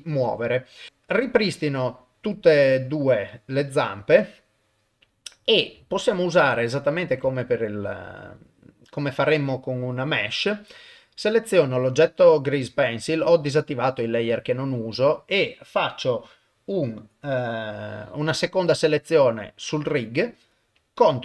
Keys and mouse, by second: 0.9 click, 5.9 shift+middle click, 8.4 shift+click.